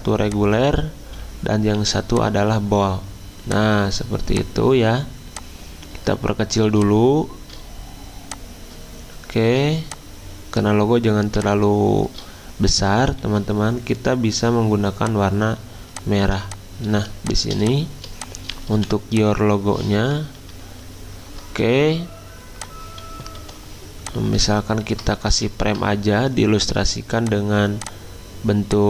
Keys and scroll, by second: 1.7 t, 16.2 z, 18.7 v, 20.1 alt+Left, 20.5 alt+Left, 20.8 alt+Left, 23.4 i, 25.3 x.